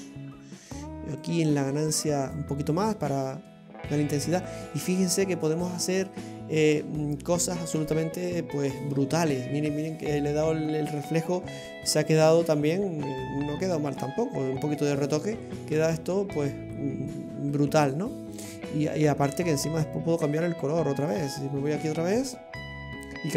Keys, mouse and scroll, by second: 1.3 click, 5.8-8.8 scroll down 13, 8.8-11.8 scroll down 5, 15.4-17.1 scroll up 12, 17.4-17.8 scroll down 2, 17.8 middle click, 20.0 click.